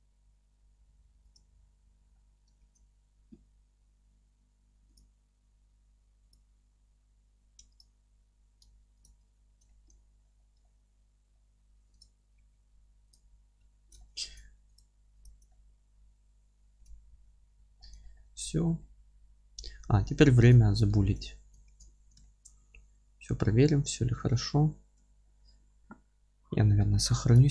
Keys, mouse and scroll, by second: 2.1-2.6 scroll up 1, 2.6 alt+c, 6.6-7.8 middle drag, 7.8 click, 8.3 g, 9.1 ctrl+click, 9.3-9.7 scroll down 1, 9.7-12.0 alt+middle drag, 10.0 scroll down 1, 12.0 click, 12.4 g, 13.1 click, 13.3 g, 14.0 alt+middle click, 14.8 click, 15.5-27.5 alt+middle drag, 17.2 g, 17.8 scroll down 1, 18.4 Tab, 19.7 alt+q, 21.3-22.2 scroll down 1, 25.0 scroll down 1.